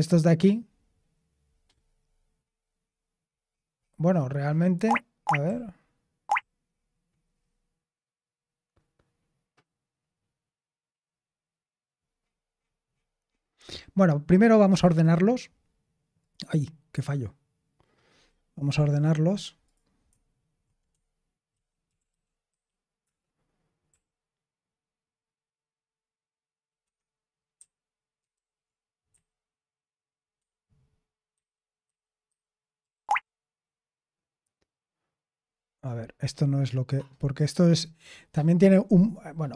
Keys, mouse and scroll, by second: 5.4-6.3 typing, 21.5 ctrl+f, 21.6-23.8 typing, 23.0 Return, 26.8 Escape, 27.5 n, 28.3 super+h, 29.0 n, 30.3 Escape, 31.3-33.0 typing.